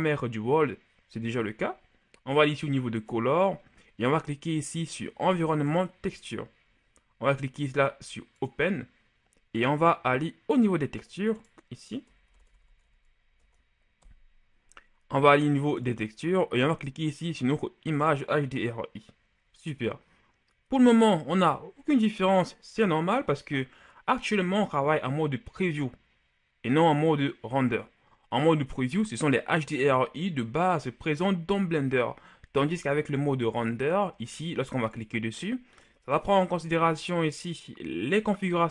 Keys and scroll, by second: 12.0-13.3 typing.